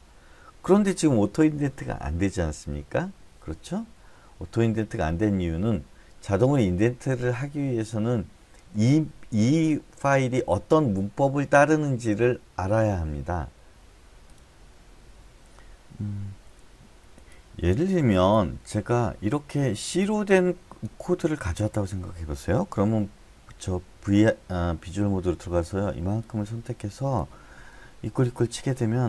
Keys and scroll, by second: 24.1 v, 28.0 =, 28.2 =.